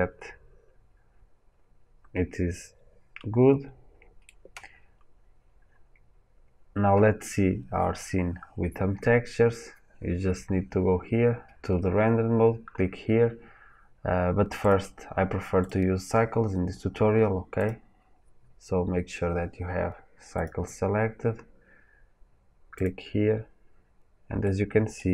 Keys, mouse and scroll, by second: 5.5-6.5 scroll down 2, 6.5-9.1 scroll up 2, 9.1-12.9 scroll up 1, 20.4-22.8 drag, 24.4 middle click.